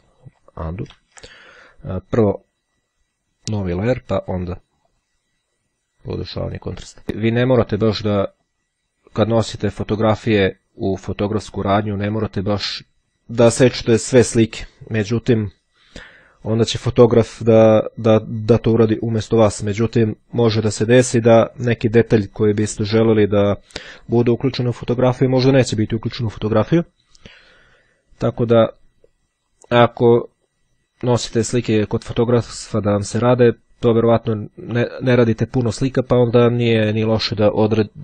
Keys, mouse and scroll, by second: 0.3 ctrl+z, 2.0 click, 3.3 click, 5.1 click, 6.3-7.9 drag, 8.6-9.9 drag, 10.5-12.2 drag, 12.4 click.